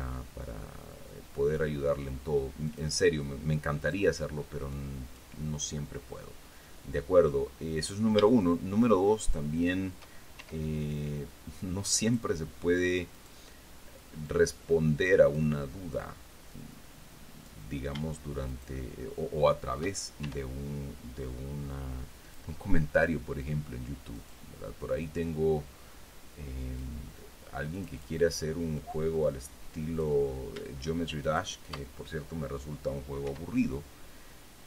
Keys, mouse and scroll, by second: 3.0 click, 4.1 right click, 5.1 click, 5.9-8.4 drag, 9.5 shift+right click, 10.7 shift+e, 12.4 click, 13.5 right click, 14.6-15.9 drag, 16.8-18.0 drag, 18.8 shift+right click, 19.4 shift+middle click, 20.6 shift+e, 22.6 click, 24.5 right click, 25.6-27.3 drag, 28.1 click, 29.1-30.5 drag, 31.6 shift+right click, 33.6 e.